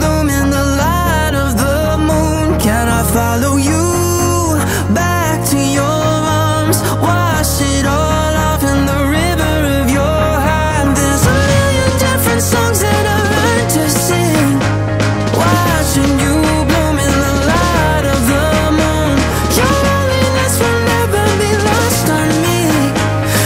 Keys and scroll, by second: 6.3 ctrl+g.